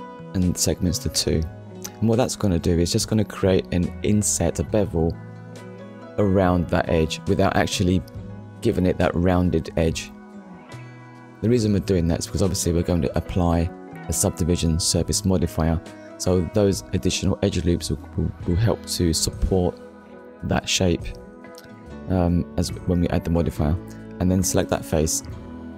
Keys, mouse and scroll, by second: 0.7 middle click, 1.4 scroll up 1, 2.5 click, 11.2 click, 11.9 click, 12.5 middle click, 15.1 click, 15.7 middle click, 18.0 click, 19.1 click.